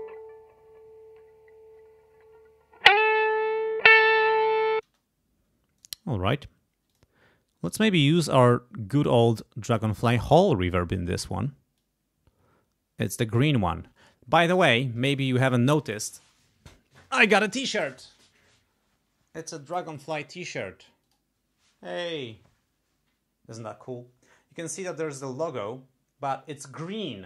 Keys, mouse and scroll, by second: 4.8 space, 5.8-6.9 shift+right drag, 7.0 shift+click, 9.8 click, 10.7 click, 11.7-13.1 drag.